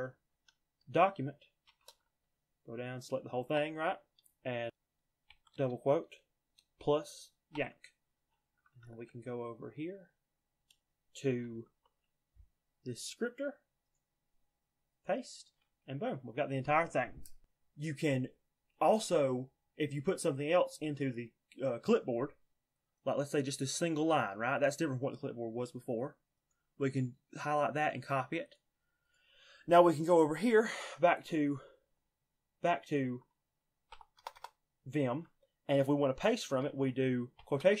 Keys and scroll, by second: 0.0-0.3 typing, 1.5 shift+v, 2.1 j, 2.8-3.4 j, 5.2 shift+', 7.4 y, 8.7 ctrl+l, 11.4 alt+l, 30.6-33.8 typing, 37.3 shift+'.